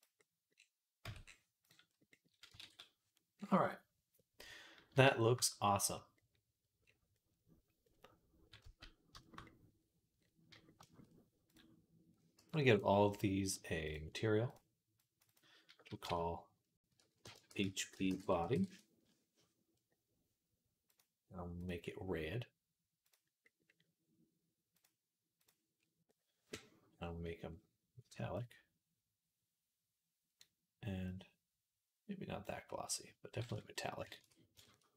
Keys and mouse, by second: 0.0 middle click, 0.9 Tab, 1.7-5.4 middle drag, 2.5 ctrl+s, 6.2 click, 6.4 click, 6.7-11.3 middle drag, 8.5 z, 9.4 z, 11.3 click, 11.4-13.7 middle drag, 12.2 b, 13.7 click, 13.8 middle click, 14.5 click, 15.0 middle click, 15.1-20.8 drag, 20.8-25.6 middle drag, 24.6-33.3 drag, 34.0 ctrl+s.